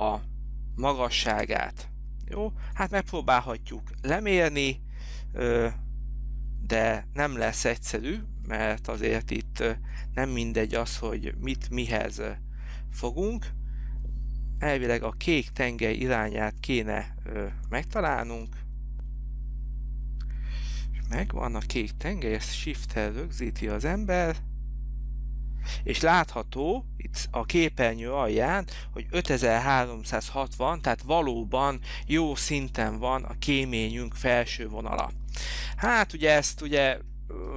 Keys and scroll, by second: 1.5 space, 7.4 Escape, 18.4 Right, 19.0 Down, 35.4 Escape, 35.8 space.